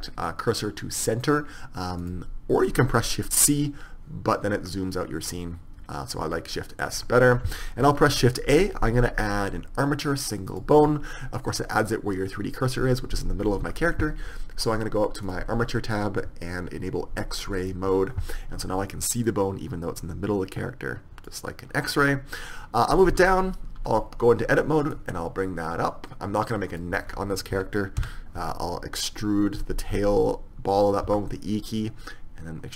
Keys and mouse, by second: 4.8-8.5 middle drag, 8.2 shift+a, 13.4 middle click, 13.7 KP_1, 15.3-17.2 drag, 17.7-21.2 drag, 22.0-24.1 middle drag, 23.2 Tab, 25.0-27.0 drag, 27.2-29.2 middle drag, 28.1 e.